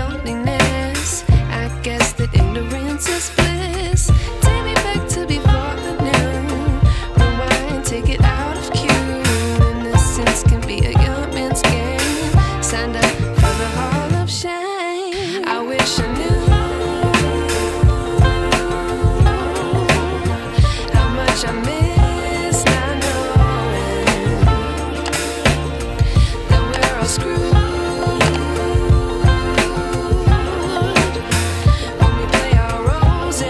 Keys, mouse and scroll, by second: 2.1 space, 2.6-3.2 ctrl+drag, 8.1 click, 23.0 space, 23.6-24.0 alt+click, 24.4-25.3 click, 25.4 v, 26.1 click, 27.6-28.5 alt+drag, 28.9 ctrl+t, 30.6-31.5 drag.